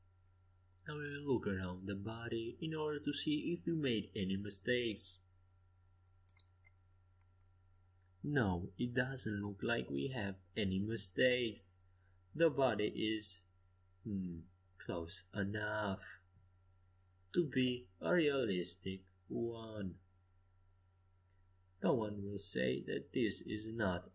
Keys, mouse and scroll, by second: 9.7-11.6 middle drag, 11.6 KP_5, 12.0 KP_1, 13.0 KP_5, 13.5 KP_5, 15.7 KP_3, 17.4 middle click, 20.2-22.5 middle drag, 23.2-24.1 middle drag.